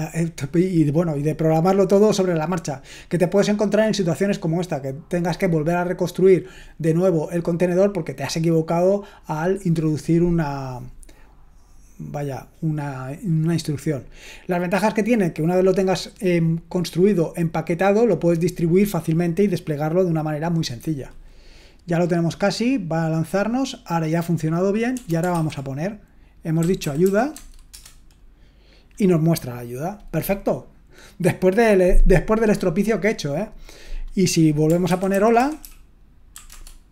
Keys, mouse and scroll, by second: 24.1 click, 25.3 shift+/, 26.8-27.5 typing, 27.7 Return, 35.1-36.3 typing, 36.5 Return.